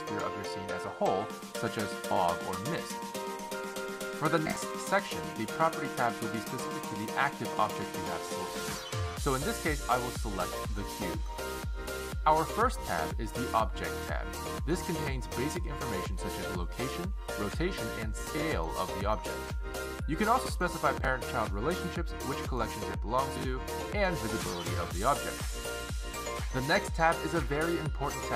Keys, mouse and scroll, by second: 0.1 click, 11.5 click, 14.1 click, 21.2-22.0 scroll down 2, 22.0 click, 22.9-23.7 scroll down 4, 23.7 click, 23.9-24.3 scroll down 3, 25.0 click, 25.2-26.0 scroll down 4, 27.2 click.